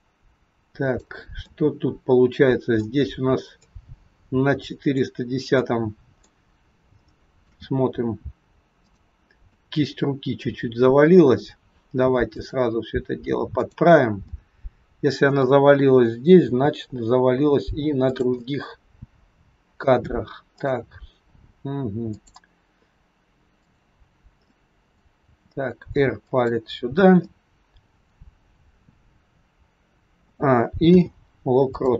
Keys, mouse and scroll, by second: 1.5 middle click, 3.6 click, 5.6 middle click, 6.5-6.8 scroll up 4, 7.0 shift+middle click, 8.8 click, 9.5 middle click, 12.3 click, 13.6 click, 14.2 middle click, 14.2-15.7 scroll up 1, 16.3 r, 18.3 middle click, 20.4 click, 22.1 click, 24.4 middle click, 25.2 r, 27.2 middle click, 30.2 a, 30.8 i.